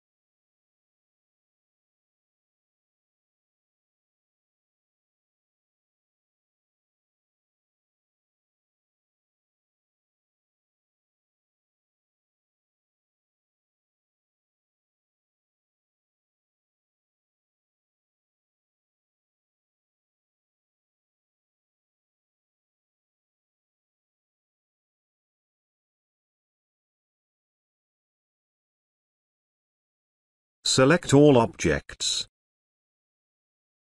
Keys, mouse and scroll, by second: 0.1-0.4 space, 1.6-4.7 drag, 12.1 space, 12.3 ctrl+click, 14.1-19.1 click, 15.4 click, 16.8-19.1 drag, 19.8 space, 19.9 ctrl+alt+click, 22.8 ctrl+click, 26.5 ctrl+y, 27.1-33.9 ctrl+alt+drag.